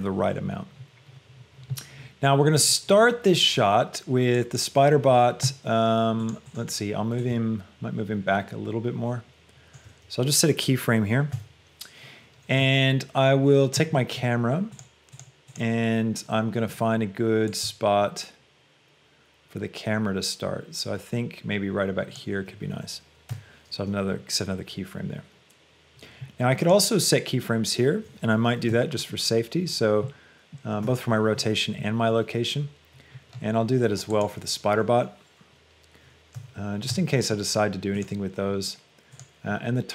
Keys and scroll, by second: 11.6 shift+i.